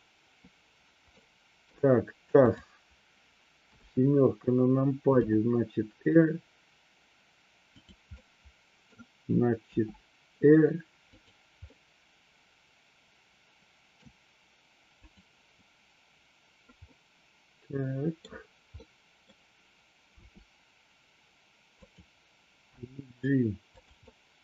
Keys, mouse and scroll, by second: 1.1-1.6 middle drag, 2.5 click, 3.6 KP_7, 5.2 r, 8.2-8.8 middle drag, 9.6 r, 11.7-14.0 middle drag, 15.0 click, 16.8-18.2 middle drag, 18.8-19.2 middle drag, 20.1 r, 21.7 click, 22.6 g, 24.1-24.4 middle drag.